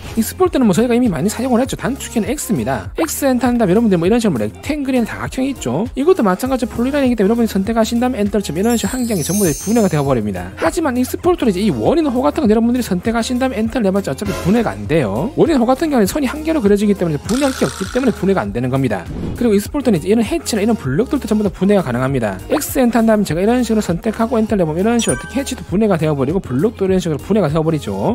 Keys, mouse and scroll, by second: 3.2 x, 3.8 right click, 7.8 click, 8.1 click, 11.3 x, 11.6 right click, 13.0 click, 13.3 click, 14.2 right click, 14.8 click, 20.6 click, 21.5 click, 22.9 x, 23.2 right click, 23.8 click, 24.5 click, 25.0 right click, 25.8 click, 26.8 click, 27.1 click.